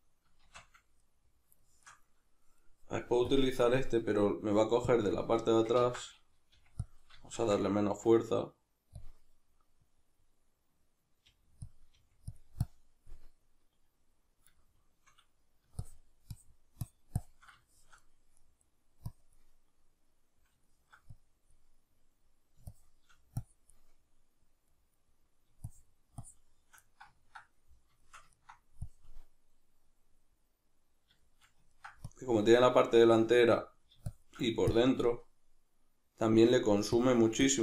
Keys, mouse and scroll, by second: 0.4 shift+c, 3.3-6.9 drag, 5.8 ctrl+z, 6.5 f, 7.3 shift+f, 9.1 click, 9.9-11.7 drag, 11.3 f, 11.9 f, 12.9-14.9 drag, 14.9 shift+middle click, 15.8-17.7 shift+drag, 17.7-19.2 shift+middle drag, 19.2-20.7 drag, 20.7 shift+middle click, 21.2-24.6 drag, 24.6-25.6 middle drag, 25.6-26.8 shift+drag, 26.8-29.2 middle drag, 29.2-31.2 drag, 31.2-32.2 shift+middle drag, 32.2-37.6 drag.